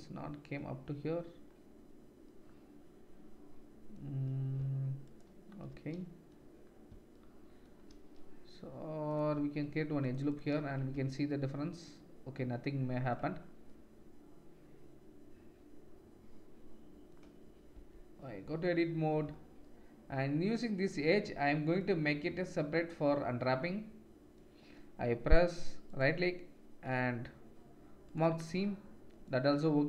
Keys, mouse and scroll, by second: 5.0 alt+shift+click, 9.1 click, 9.6 ctrl+r, 11.0 Tab, 16.2 click, 16.4 middle click, 16.5 click, 16.6 middle click, 16.8 click, 17.1-18.7 middle drag, 17.7 Tab, 25.9-29.8 drag.